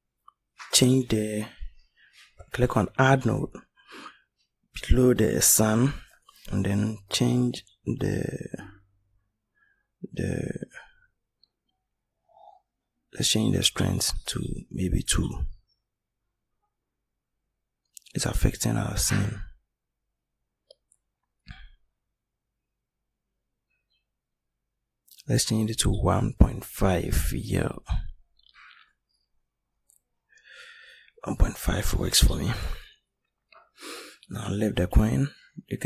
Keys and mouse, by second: 13.2 click, 30.2-32.3 right drag.